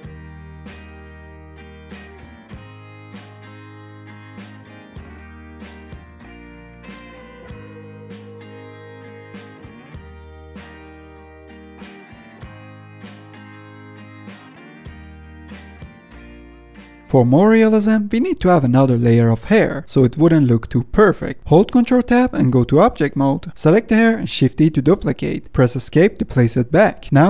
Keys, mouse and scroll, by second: 0.9 middle drag, 1.0 click, 1.2 middle click, 1.3 drag, 1.5 middle drag, 1.7 click, 1.8 middle drag, 1.9 click, 2.1 middle click, 2.3 drag, 2.5 middle click, 2.6 f, 2.7 shift+middle click, 2.9 drag, 3.1 middle click, 3.2 click, 3.4 middle click, 3.5 click, 3.9 middle click, 4.0 click, 4.2 middle click, 4.3 click, 4.6 middle click, 4.7 ctrl+Tab, 4.8 scroll down 2, 4.9 middle click, 5.1 ctrl+Tab, 5.2 middle click, 5.3 scroll up 3, 5.4 shift+middle drag, 5.6 drag, 5.9 middle drag, 6.1 f, 6.2 drag, 6.4 ctrl+z, 6.5 click, 6.7 middle drag, 6.9-7.2 drag, 7.2 middle click, 7.4 click, 7.5 middle click, 7.9 click, 8.3 ctrl+z, 8.4 click, 8.6 middle click, 8.8 click, 9.0 middle drag, 9.0 scroll down 1, 9.2 middle drag, 9.4 scroll up 2, 9.5 f, 9.7 click, 10.0 shift+middle click, 10.4 click, 10.5 scroll up 1, 10.5 f, 10.8-11.3 drag, 11.3 middle click, 11.4 scroll down 2, 11.4-11.8 middle drag, 11.8 scroll up 1, 12.0-13.8 drag, 13.8 scroll down 1, 13.9 scroll up 1, 14.0-15.8 drag, 15.8 scroll down 3, 15.9 middle drag, 16.0 scroll up 3, 16.1 middle drag, 16.3-16.9 drag, 16.9 middle click, 16.9 scroll down 3, 17.0-17.4 middle drag, 17.2-17.8 scroll up 5, 17.4-17.8 drag, 17.8 scroll down 1, 18.3-20.4 drag, 20.4 ctrl+z, 20.8-21.3 middle drag, 21.3 scroll down 1, 21.6-22.0 middle drag, 22.0 scroll up 2, 22.8 ctrl+Tab, 24.0 middle click, 25.1 shift+d, 27.0-27.2 middle drag.